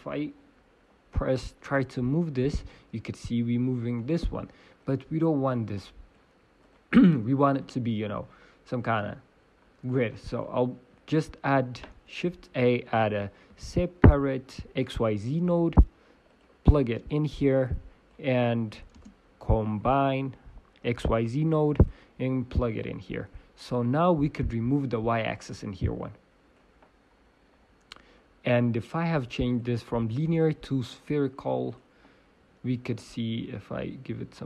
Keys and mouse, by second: 1.7 g, 3.2 middle click, 4.1 middle click, 4.8-8.7 drag, 4.8-6.1 right drag, 10.1-15.6 drag, 15.6 Down, 15.6 shift+a, 16.8-21.9 drag, 21.9 shift+space, 23.6-27.7 drag, 24.4-26.5 right drag, 27.5 right click, 27.7 middle click, 33.1-34.4 middle drag.